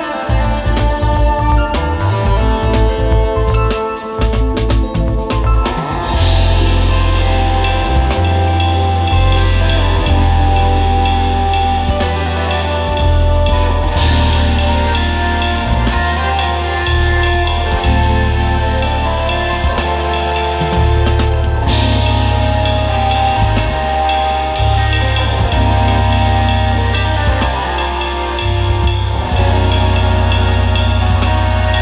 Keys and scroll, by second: 11.0 super+[, 13.0 space, 13.4 space, 17.6 space, 18.4 space, 18.7 space, 20.7 super+[, 24.7 space, 26.2 space, 27.7 space, 28.4 space, 30.7 super+g, 31.1 space.